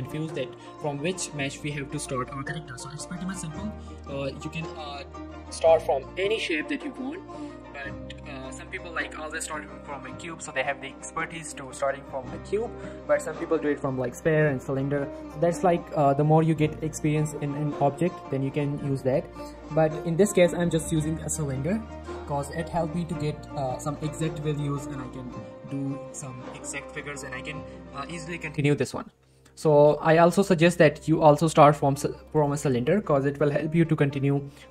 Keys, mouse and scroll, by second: 0.1 shift+middle click, 5.0 shift+middle click, 6.4 shift+a, 22.4 click, 22.8 scroll down 1, 23.0 middle click, 23.3 scroll up 1, 23.6 middle click, 23.8 shift+middle click, 29.9 click, 32.3 click.